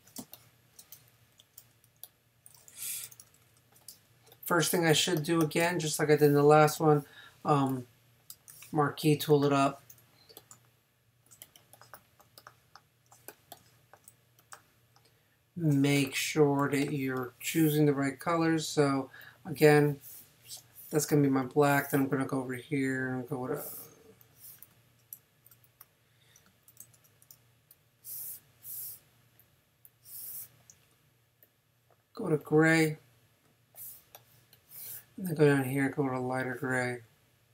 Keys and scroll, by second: 0.2 super+space, 1.6 v, 3.0 super+-, 3.9 super+space, 5.6 space, 25.3 super+z, 26.8 super+z.